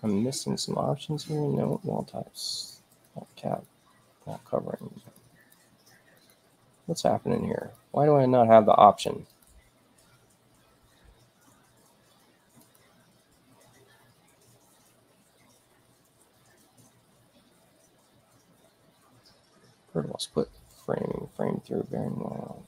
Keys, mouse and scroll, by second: 1.5 click, 2.8 click, 3.4 click, 4.4 click, 4.9 click, 5.3 click, 6.1 click, 7.5 click, 8.9 click, 9.2 click, 12.5 click.